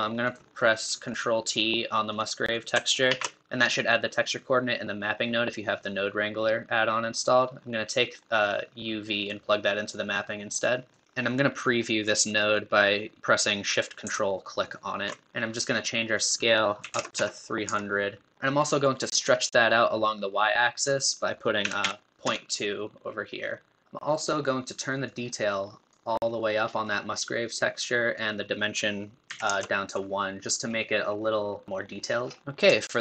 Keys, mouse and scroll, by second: 10.9-31.8 drag, 31.8 scroll up 10.